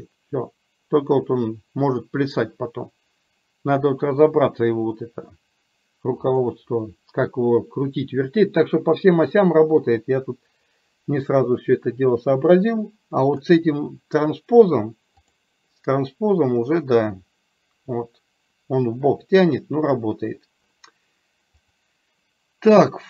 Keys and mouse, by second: 15.3 click, 16.9-20.1 drag, 21.6-23.0 drag.